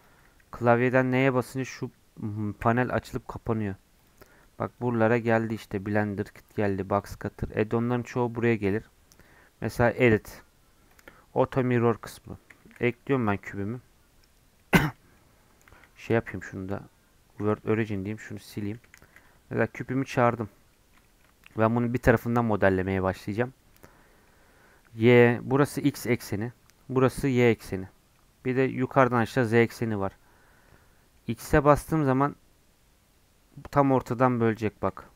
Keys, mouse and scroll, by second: 0.2 n, 1.2 n, 3.9-12.0 drag, 12.0 middle click, 12.5 shift+a, 13.5 scroll up 4, 13.7 middle click, 14.6 middle click, 15.2-15.6 scroll down 3, 15.6 middle click, 16.2 shift+s, 17.8 click, 18.1 x, 18.9 shift+a, 20.0 scroll down 1, 20.1 middle click, 20.3 scroll up 2, 20.7-22.0 shift+middle drag, 22.0 KP_Decimal, 22.3 middle click, 22.5-22.9 scroll down 4, 23.2 middle click, 23.6 scroll down 1, 23.7-26.7 middle drag, 28.1-29.8 middle drag, 29.8 scroll up 4, 30.0-34.5 middle drag, 34.5 click, 35.0 Tab.